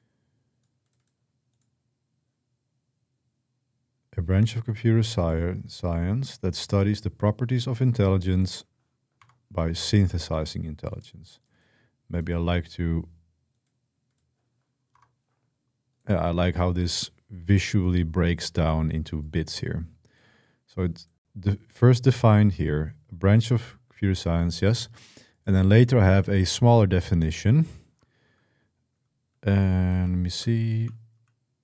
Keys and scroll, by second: 9.0 Return, 14.8 Return, 29.4-31.6 typing.